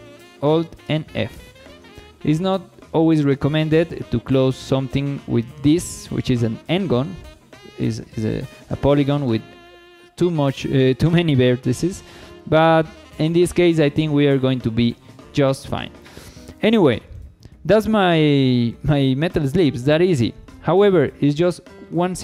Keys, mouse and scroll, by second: 0.9 f, 1.5 shift+middle click, 2.0 middle click, 3.0 shift+middle click, 3.5 middle click, 12.3 Tab, 12.6 scroll down 1, 12.9 shift+middle click, 13.7 KP_1, 14.2-14.6 scroll down 2, 14.6 shift+middle click, 15.5 scroll up 2, 15.8 shift+middle drag, 16.2-17.2 middle drag, 17.8 KP_1, 18.3 scroll down 2, 18.7 shift+middle click, 19.9 shift+middle click, 21.8 scroll up 2.